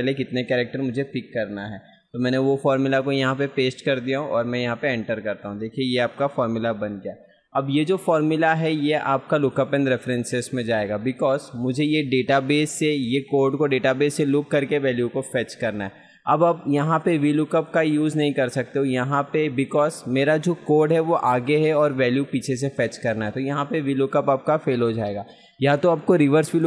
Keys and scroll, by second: 7.3 F2.